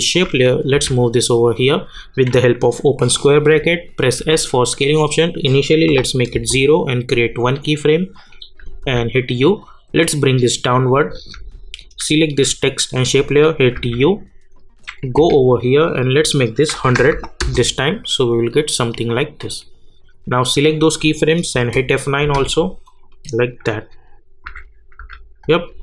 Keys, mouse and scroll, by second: 0.7 [, 4.2 s, 5.4 click, 6.3 Return, 7.4 click, 8.8 u, 9.6-12.2 drag, 13.7 u, 14.5 click, 15.2 k, 16.1 click, 17.4 Return, 20.1-21.5 drag, 21.5 F9, 22.8 click, 24.4 u, 25.0 u.